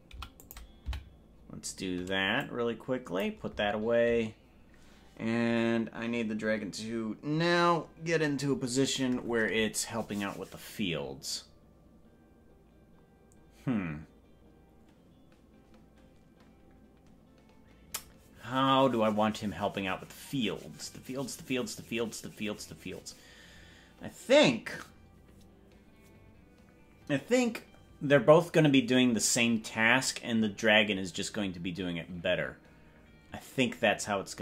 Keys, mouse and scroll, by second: 0.2 i, 1.0 Right, 2.4 click.